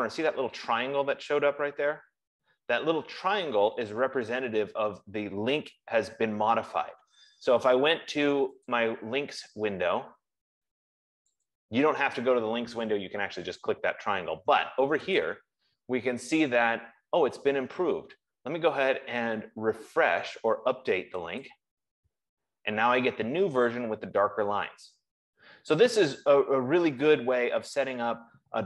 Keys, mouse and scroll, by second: 9.2 click, 11.9 click, 15.5 click, 20.1 F15, 21.8 click.